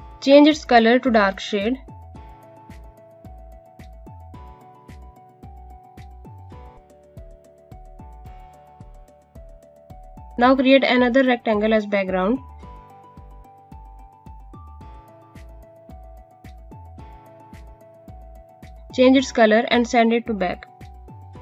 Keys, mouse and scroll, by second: 0.3 click, 15.8 click.